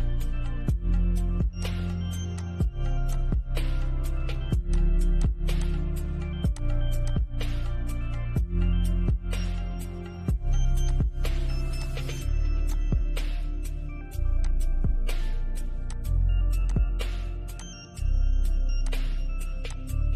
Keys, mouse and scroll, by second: 0.9 click, 10.1 click.